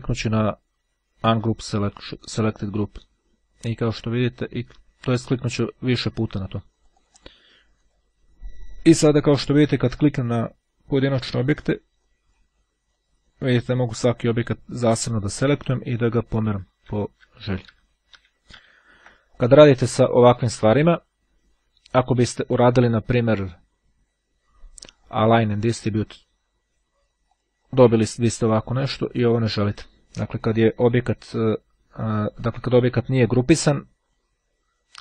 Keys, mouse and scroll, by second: 1.0-3.3 drag, 4.5-6.3 drag, 6.4-7.9 drag, 8.1 click, 8.9 click, 10.0 click, 11.4 click, 13.0 click, 14.7 click, 16.5 ctrl+z, 22.0-23.3 drag, 24.7-25.7 drag, 27.4-28.5 drag.